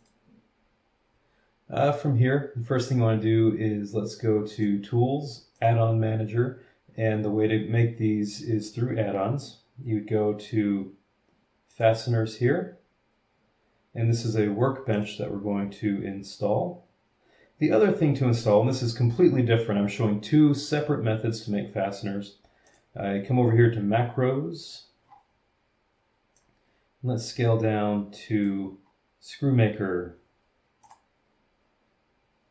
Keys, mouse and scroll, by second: 0.0 click, 4.5 click, 5.5 click, 8.4-8.7 scroll down 1, 8.9 scroll down 2, 9.7-10.3 scroll down 3, 10.8 scroll up 1, 11.7 click, 14.9 click, 22.7 click, 25.0-25.5 scroll down 3, 26.4-28.6 drag, 28.8 scroll up 1, 29.9 scroll up 2, 30.8 click.